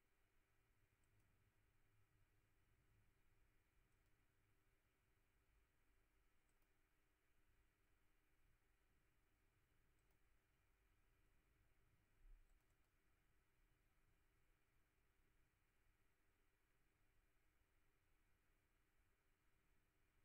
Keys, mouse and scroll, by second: 1.0 click, 3.9 click, 6.5 click, 10.0 click, 12.5 click, 13.4 click.